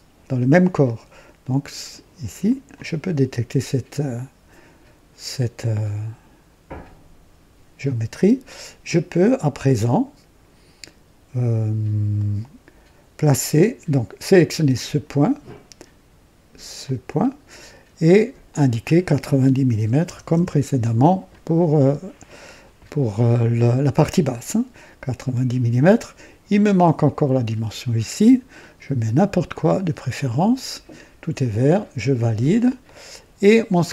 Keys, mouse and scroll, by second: 2.4 click, 12.1 right click, 14.6 click, 16.8 click, 18.4 click, 19.7 KP_9, 20.0 KP_0, 20.3 KP_Enter, 27.0 click, 28.5 click, 30.1 click, 31.7 click, 32.8-33.9 drag.